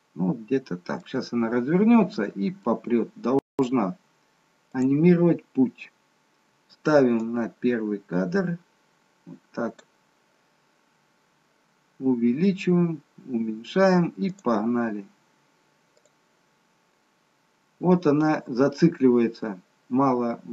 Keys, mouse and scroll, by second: 1.6 click.